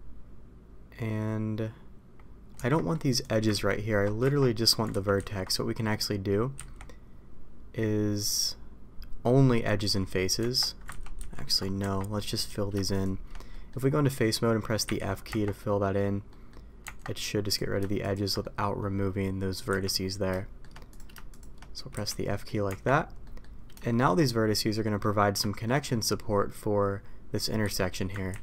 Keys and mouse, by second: 2.5 Tab, 3.5 ctrl+x, 4.2 Tab, 4.9 ctrl+z, 6.5 x, 10.3 Tab, 10.8 ctrl+z, 11.7 Tab, 13.4 middle click, 14.8 f, 15.2 Tab, 16.2 middle click, 16.8 Tab, 18.4 middle click, 19.7 f, 20.3 shift+middle click, 21.3 shift+click, 21.9 f, 22.2 middle click, 22.6 Tab, 23.2 middle click, 23.8 shift+middle click, 24.7 middle click, 25.4 shift+middle click, 25.8 middle click, 27.6 a, 28.3 ctrl+t.